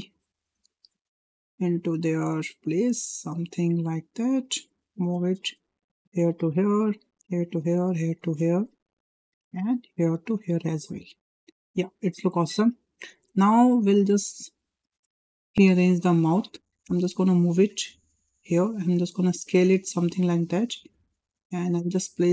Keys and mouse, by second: 0.2 click, 1.0-1.7 drag, 2.2-3.5 drag, 4.0 click, 4.7-5.4 drag, 5.9 click, 6.5 click, 7.4 drag, 8.0 click, 9.2 drag, 9.7 click, 9.8-11.1 drag, 11.7 shift+middle click, 12.2 shift+middle click, 12.7 shift+middle drag, 14.3 click, 15.2 ctrl+l, 16.9-18.0 drag, 18.9 s, 21.5 click, 21.7 click.